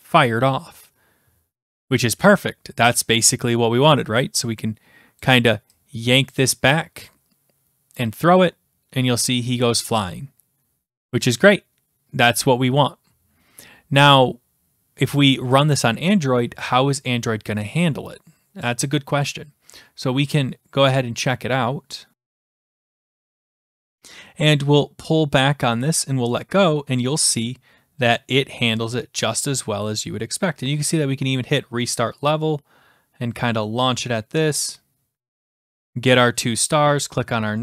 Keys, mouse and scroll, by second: 5.2 click, 6.3 click, 7.9 click, 12.3 click, 13.4 click, 15.6 click.